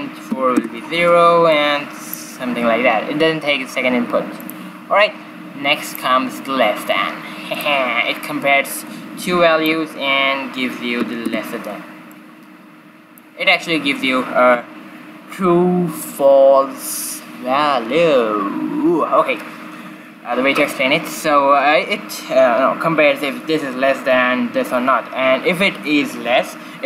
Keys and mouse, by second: 1.5-3.4 drag, 4.3-7.6 drag, 7.7 click, 9.2-11.1 drag, 12.1-13.9 drag.